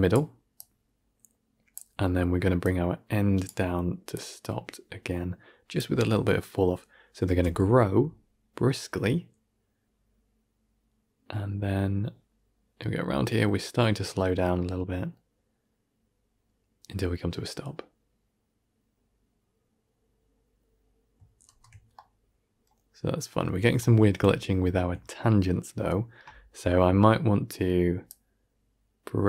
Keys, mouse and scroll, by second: 7.1 shift+space, 21.5 shift+space, 21.8-23.4 middle drag, 23.4 scroll up 2, 23.7-24.7 shift+middle drag, 24.9-25.6 scroll down 2.